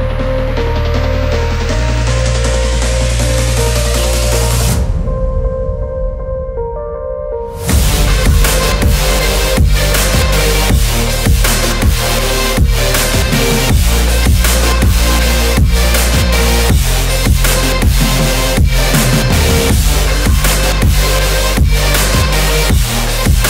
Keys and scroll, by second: 0.5 ], 2.8 ctrl+t, 14.4 ctrl+-, 14.9 ctrl+-, 16.5 Left, 21.1 ctrl+o.